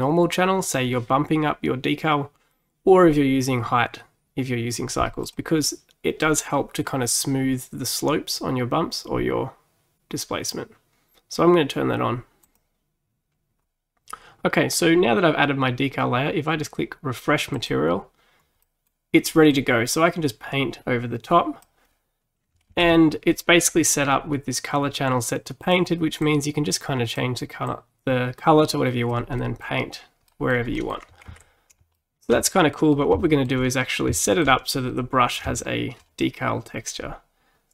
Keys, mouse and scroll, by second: 17.6-18.7 drag, 18.7-20.0 middle drag, 20.0-22.8 drag, 22.8 ctrl+z, 25.7 click, 27.7-29.4 drag, 29.4-31.4 middle drag, 31.4 ctrl+z, 32.0-37.7 shift+middle drag.